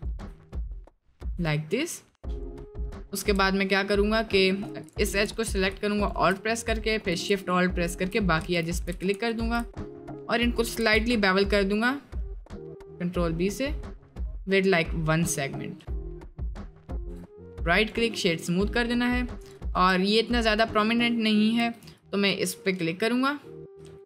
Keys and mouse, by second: 1.3 Tab, 1.9-2.3 middle drag, 2.8 middle drag, 4.6 Tab, 4.6 2, 5.3 alt+click, 6.0 alt+shift+click, 6.4-7.0 middle drag, 7.9 alt+shift+click, 8.5 ctrl+shift+z, 9.7 middle click, 11.0 ctrl+b, 17.1 Tab, 17.3-17.9 drag, 18.7 middle drag, 19.2 middle click, 19.4 click, 20.0 middle click, 21.0 middle click, 21.5 3, 23.4 middle click.